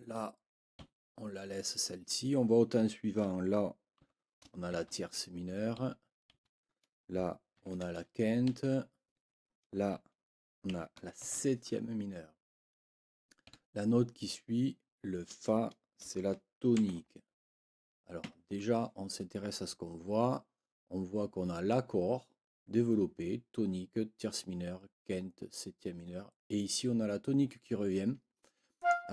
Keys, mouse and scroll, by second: 0.8 Right, 4.0 b, 5.8 Right, 7.6 shift+9, 8.4 Right, 10.7 b, 13.4 Right, 16.8 shift+t, 18.2 Escape, 28.8 click.